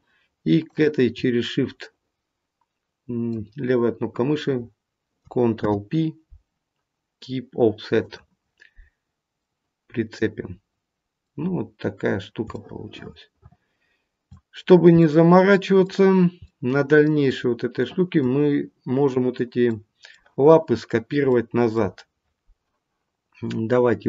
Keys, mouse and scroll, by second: 1.7 middle click, 5.5 ctrl+p, 9.2 middle click, 11.4-12.3 scroll down 1, 12.3 scroll down 1, 12.5 shift+middle click, 15.0 middle click, 15.0 scroll down 1, 16.0-16.4 scroll down 2, 16.4 middle click, 17.8 middle click, 19.7 middle click, 21.2 middle click.